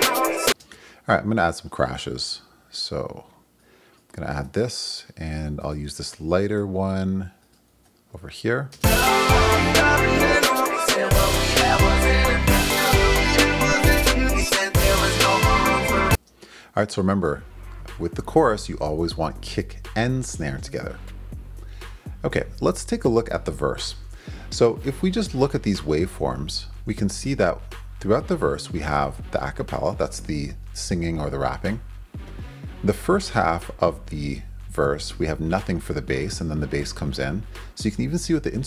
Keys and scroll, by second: 0.5 space, 2.3 super+c, 4.4 super+v, 6.5 super+c, 7.8 super+v, 8.7 super+space, 9.8 space, 16.1 space.